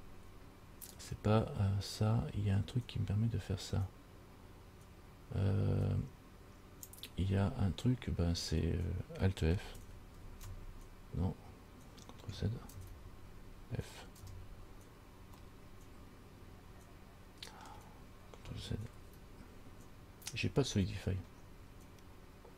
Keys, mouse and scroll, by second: 1.1 click, 10.4 alt+f, 12.9 ctrl+z, 14.4 f, 15.7 middle click, 19.2 ctrl+z, 21.5-22.3 scroll up 3.